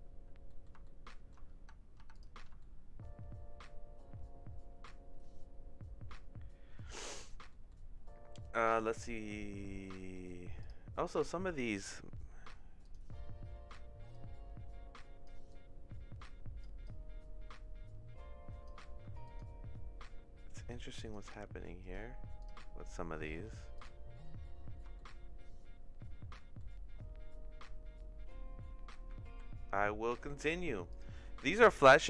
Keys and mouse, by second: 0.4 middle click, 0.8 shift+middle click, 1.5 Tab, 2.1 Tab, 2.1 click, 2.5-6.8 shift+middle drag, 7.5 middle click, 8.6 shift+middle click, 9.8 middle click, 12.8 click, 14.2-15.2 drag, 15.5-16.6 drag, 16.8-18.6 drag, 19.2 click, 20.6 right click, 22.0 right click, 22.4 click, 23.7 click, 24.9-26.5 shift+middle drag, 29.3 ctrl+z, 30.3 middle click.